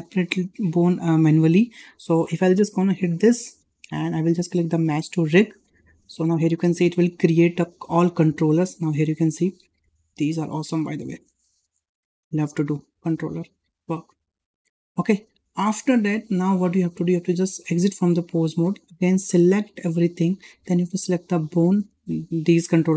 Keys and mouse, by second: 3.0 click, 8.7 shift+middle drag, 9.2-10.5 middle drag, 10.8 shift+middle drag, 11.2-12.1 middle drag, 12.3 shift+middle drag, 12.7 middle click, 13.2 shift+middle drag, 13.7-14.3 middle drag, 14.8 middle drag, 15.2 `, 16.9 click, 19.1 click, 21.1 shift+click, 21.6 shift+click.